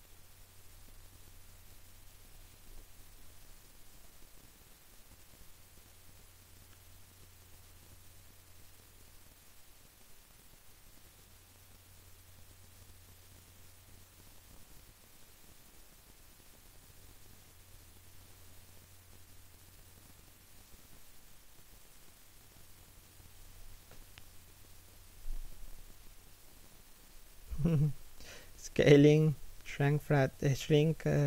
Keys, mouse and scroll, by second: 1.5-2.4 scroll down 1, 2.4 3, 2.5 1, 4.1-9.3 typing, 14.1 shift+middle click, 15.3 scroll up 1, 15.5 a, 16.2 alt+right click, 17.0 w, 18.7 s, 22.3 alt+s, 25.5 s, 27.4 r, 28.0 g, 29.9 a, 30.3 alt+shift+middle click, 31.1 alt+right click.